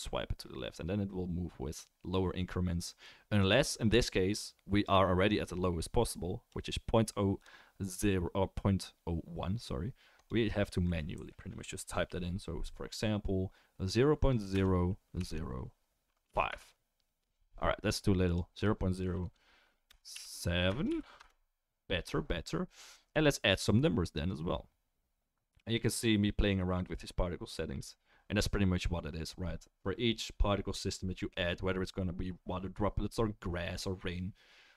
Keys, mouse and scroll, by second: 27.4-34.7 drag, 27.4-34.7 middle drag, 27.4-34.7 right drag.